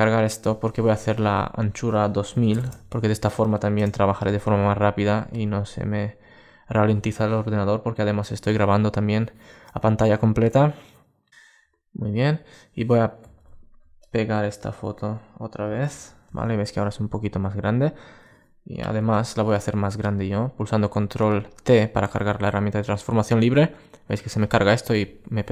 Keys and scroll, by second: 15.6 super+v, 18.5 super+t.